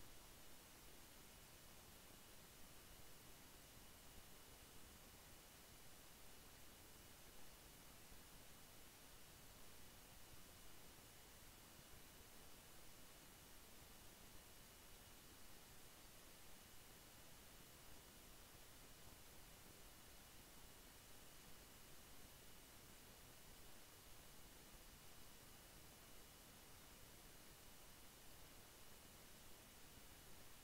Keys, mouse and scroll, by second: 3.8 click, 5.2-10.9 drag, 11.3-22.8 drag, 13.3 typing, 19.5 typing, 22.8 shift+Page_Up, 26.5 click.